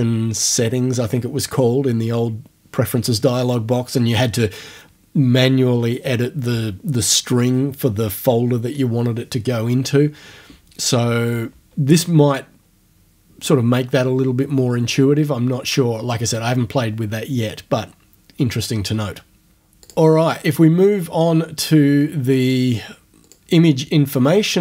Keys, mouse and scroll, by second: 13.0-18.0 scroll down 2, 19.8 click, 22.4 click, 23.3 click.